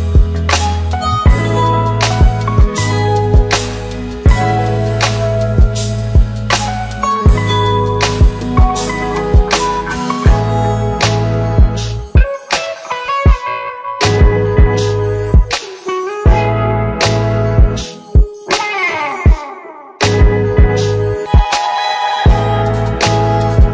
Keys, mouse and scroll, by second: 3.9 click, 6.7 click, 14.9 ctrl+d, 16.9 ctrl+d.